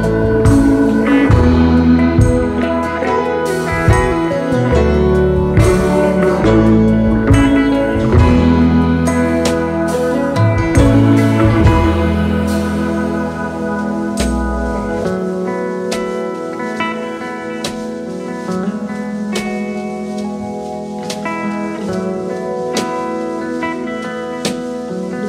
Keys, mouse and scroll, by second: 7.0 alt+scroll up 1, 7.2 space, 8.1 shift+click, 11.4 shift+click, 13.5 shift+click, 13.9 alt+click, 15.0 double click, 15.7 space, 16.8 alt+scroll down 1, 16.8-17.8 space, 19.9 space.